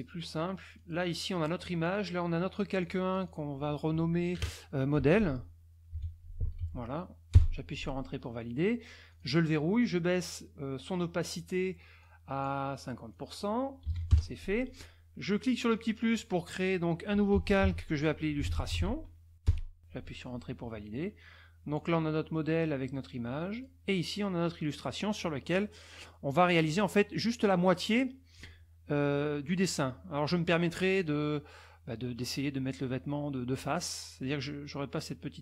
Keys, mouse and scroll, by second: 0.7 click, 1.8 click, 2.8 click, 3.2 click, 4.7-7.1 typing, 7.3 Return, 9.1 click, 12.1 click, 13.1 click, 13.8 KP_5, 13.9 KP_0, 14.1 KP_Enter, 15.7 click, 16.9-19.2 typing, 19.4 Return, 21.7 click, 23.5 click, 23.9 click, 25.6 middle click, 26.3 middle click, 30.2 middle click.